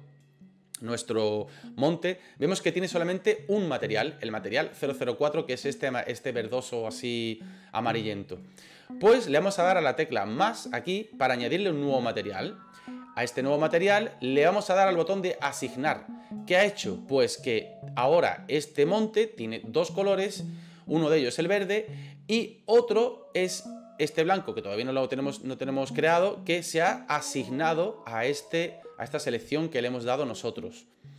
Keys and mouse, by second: 10.9 click, 15.6 click.